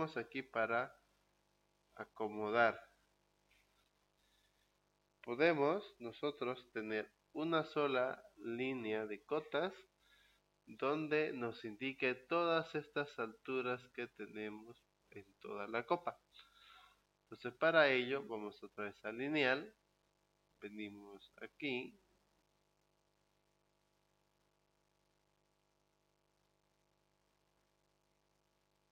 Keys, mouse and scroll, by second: 2.5 scroll down 2, 2.7-3.9 middle drag, 3.9-5.1 scroll up 2, 5.1-5.5 scroll down 2, 18.1 click, 19.3 scroll up 2, 25.3 click.